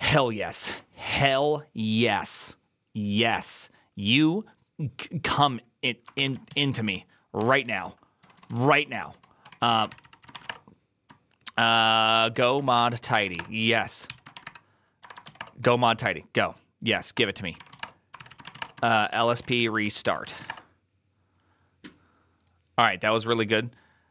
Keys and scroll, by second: 6.4 alt+{, 7.2-15.7 typing, 13.9 ctrl+c, 17.0 Return, 17.2-20.7 typing, 18.2 ctrl+c, 18.5 Return.